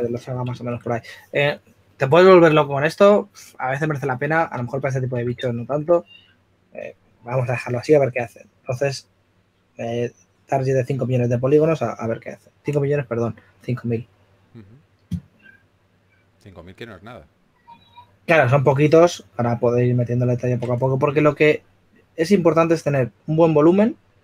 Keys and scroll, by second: 5.1 shift+f.